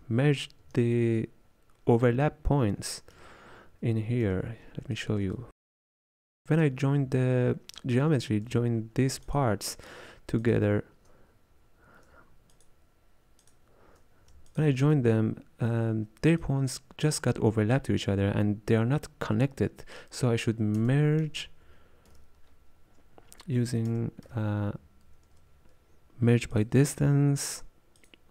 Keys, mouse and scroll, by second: 0.7 m, 3.2 m, 6.2-9.4 drag, 10.5 alt+shift+click, 11.3-12.6 scroll down 3, 12.6 alt+shift+click, 13.5 alt+shift+click, 14.6 alt+shift+click, 16.4-26.6 ctrl+drag, 26.6 space.